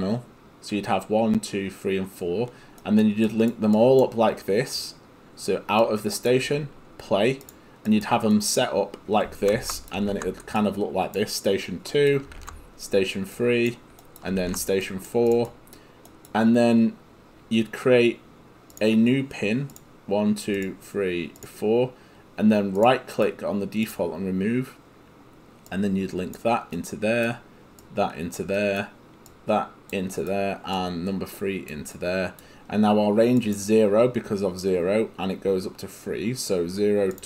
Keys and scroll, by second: 9.6 ctrl+c, 10.1 ctrl+v, 12.4 ctrl+v, 14.4 ctrl+v.